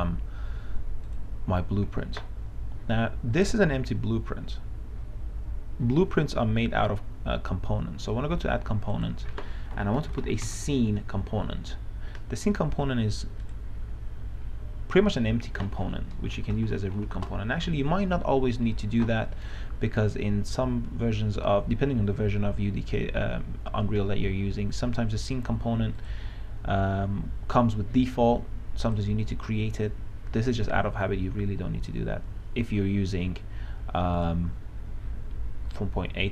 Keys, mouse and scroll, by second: 10.0-11.3 typing, 13.8 click, 16.7-17.4 typing, 26.2 click.